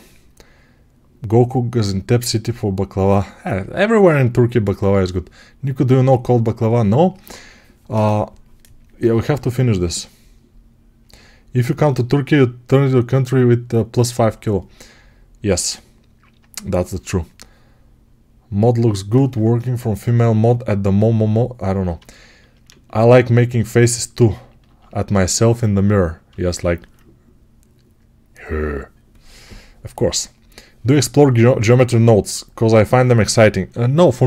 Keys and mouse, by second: 23.7 ctrl+alt+click, 23.8-34.2 ctrl+alt+right drag.